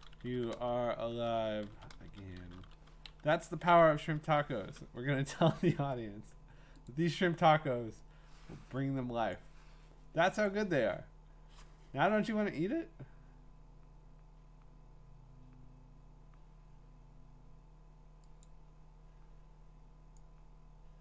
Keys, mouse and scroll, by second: 0.0-3.1 typing, 4.2 Right, 6.6 Up, 6.6 Right, 6.9 click, 9.3 click, 10.4-11.0 scroll, 11.5 scroll, 18.5 click.